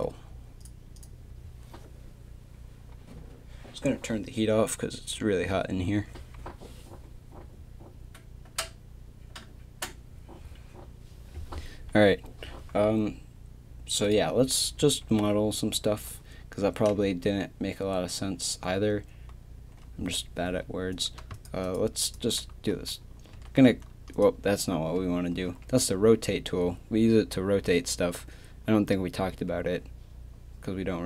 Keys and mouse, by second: 1.0-14.8 drag, 14.8 a, 20.9-23.4 right drag, 23.4 r, 25.5 r.